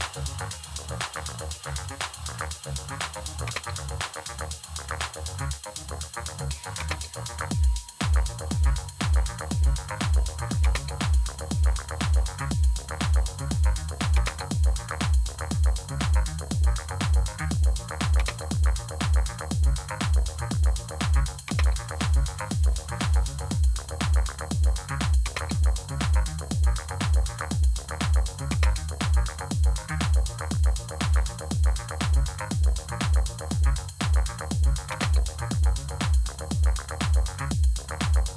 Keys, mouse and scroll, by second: 3.4 space, 6.7 space, 10.5 space, 14.0 space, 18.1 space, 21.4 space, 25.1 space, 28.4 space, 34.8 space.